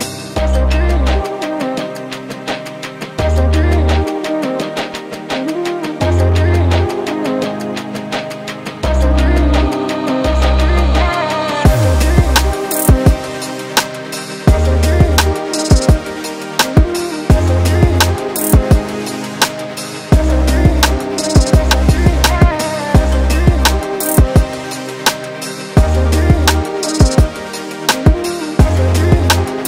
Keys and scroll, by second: 2.8 3, 3.2 ], 8.6 4, 21.5 ctrl+d, 21.6 Escape, 24.1 F9.